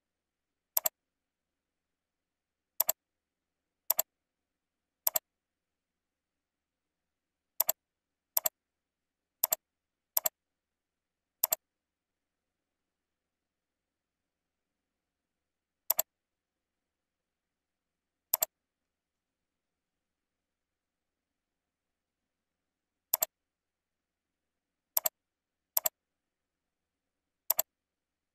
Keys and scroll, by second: 4.8 ctrl+c, 20.2 ctrl+v, 25.6 ctrl+c, 26.3 ctrl+v.